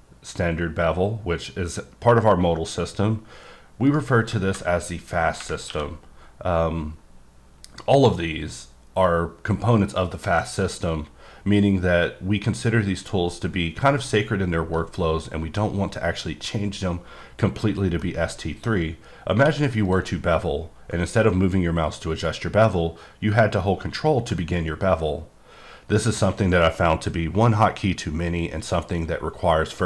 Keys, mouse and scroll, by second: 3.9 right click, 5.7 q, 18.0 middle click, 19.0-19.3 scroll up 1, 19.3 q, 19.8 click, 21.9-23.3 scroll up 3, 23.3-24.3 scroll up 1, 24.3 ctrl+scroll up 4, 24.7 typing.